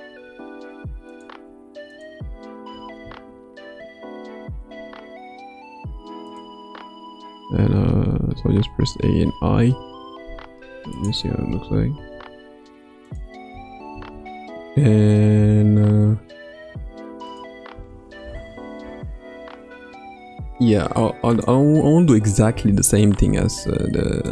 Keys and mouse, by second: 0.0 r, 2.7 r, 8.3 a, 8.8 i, 10.9 click, 11.4 space, 13.1 click, 13.1 space, 13.5 space, 15.4 space, 17.2 click, 17.7 space, 20.5 space, 21.4 drag, 22.5 space.